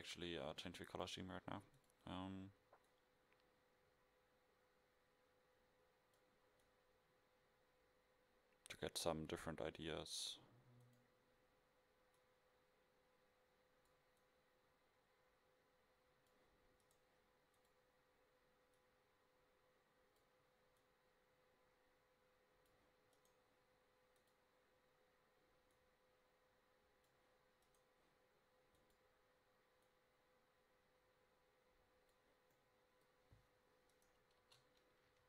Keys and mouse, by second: 10.2-14.0 drag, 16.9 right click, 17.7-18.9 middle drag, 21.2-22.9 middle drag, 23.3-24.3 right drag, 24.3-25.2 middle drag, 26.2-27.3 middle drag, 27.8-28.9 right drag, 28.9-30.4 middle drag, 32.6-33.3 middle drag, 34.0 right click, 34.5 KP_0.